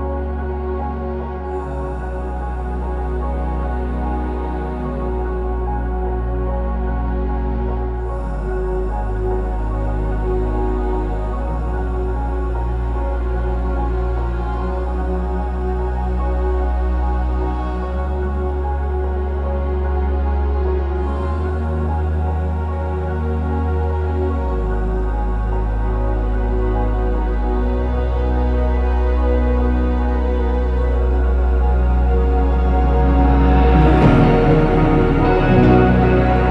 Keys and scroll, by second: 1.8 ctrl+c, 4.0 ctrl+z, 4.8 Escape, 5.6 BackSpace, 6.5 ctrl+c, 8.0 Escape, 9.7 ctrl+c, 12.7 ctrl+c, 14.7-16.9 typing, 20.4-21.2 typing, 23.5 BackSpace, 27.7 ctrl+s, 28.0-30.0 typing, 30.0 alt+Tab, 30.1 alt+Tab, 35.3-36.5 typing.